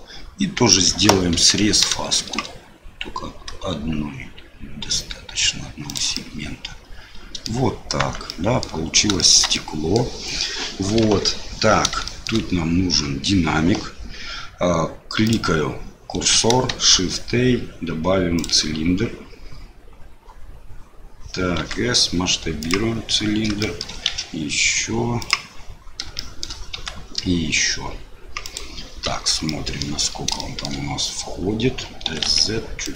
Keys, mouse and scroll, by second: 1.3 ctrl+b, 6.2 click, 6.3-7.4 middle drag, 8.0 Tab, 8.2 click, 9.1 shift+click, 9.5 click, 11.0 KP_7, 12.0 shift+click, 15.2 click, 16.7 shift+a, 21.6 s, 23.6 shift+middle click, 24.0 s, 26.2 shift+middle click, 26.7 s, 29.0 KP_3, 29.4 middle click, 30.5 shift+middle click, 32.0 s.